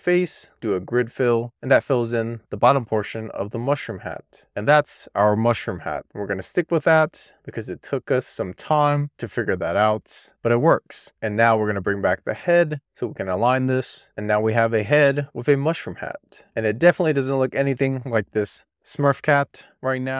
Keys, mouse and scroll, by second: 2.1-11.0 middle drag, 11.2 click, 11.4 middle click, 11.9 scroll up 2, 12.1 scroll down 1, 12.3-13.4 scroll up 1, 13.4 click, 16.4-16.8 scroll up 2, 17.0-18.6 scroll up 2, 18.6-19.1 scroll up 1.